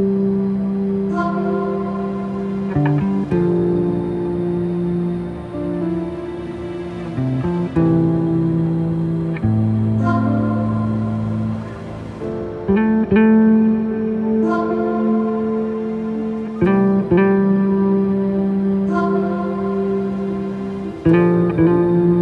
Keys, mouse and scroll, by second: 0.2 r, 3.7 KP_0, 4.8 r, 6.9 g, 9.3-13.0 drag, 13.0-15.0 scroll up 2, 17.4 shift+a, 20.2 g, 21.9 click.